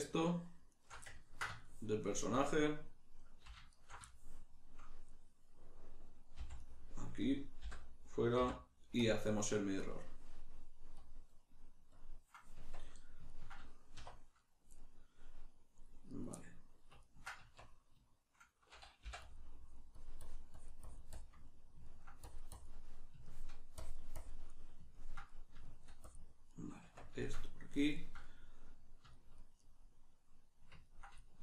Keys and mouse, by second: 0.7 alt+shift+right click, 1.1-3.7 ctrl+middle drag, 3.7 alt+shift+right click, 5.0-6.7 middle drag, 6.3 v, 7.1 right click, 7.6 l, 9.8-12.5 drag, 12.5 Tab, 12.9-14.4 middle drag, 14.0 1, 14.4 right click, 16.1 right click, 17.0-19.3 ctrl+middle drag, 17.4 Tab, 19.3-21.5 drag, 21.5 middle click, 22.3 click, 22.9 middle click, 23.8 click, 24.5-26.1 middle drag, 26.1 click, 26.5-31.4 middle drag, 26.8 Tab.